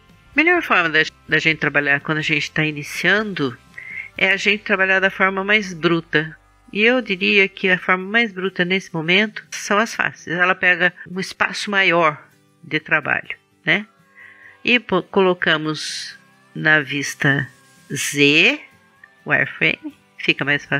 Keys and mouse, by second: 9.1 click, 17.8 middle click, 18.2-20.1 drag.